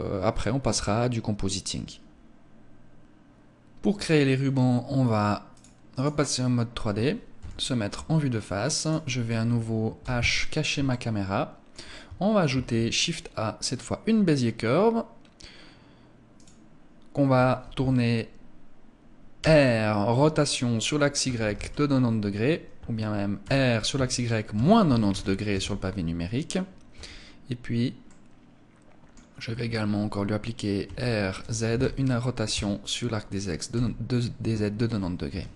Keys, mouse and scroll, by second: 5.5 click, 6.9 KP_1, 8.3 right click, 9.5 h, 10.3 shift+middle click, 12.0 shift+a, 18.9 r, 22.9 r, 26.5 Tab, 27.5 middle click, 30.3 r, 33.2 KP_1, 34.8 Tab.